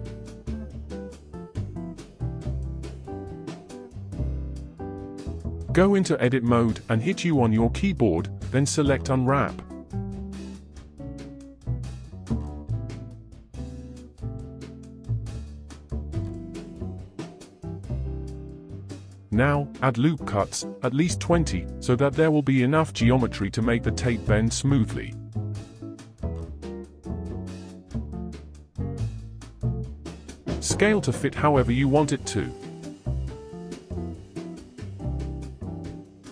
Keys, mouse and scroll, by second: 2.7-3.1 scroll down 4, 3.1-3.7 scroll up 5, 3.7-6.8 drag, 6.8 Tab, 8.1-10.2 scroll down 4, 10.2 a, 16.2 a, 18.0 ctrl+b, 18.9 ctrl+z, 20.9 ctrl+r, 28.1 a, 30.3 ctrl+z, 30.4 s, 32.2 g, 35.1 s.